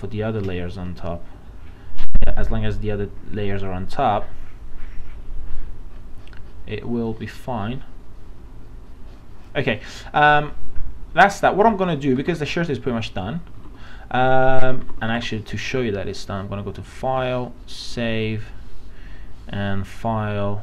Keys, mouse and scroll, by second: 12.2 alt+Tab, 13.7 alt+Tab, 14.8 alt+Tab, 16.9-20.6 drag.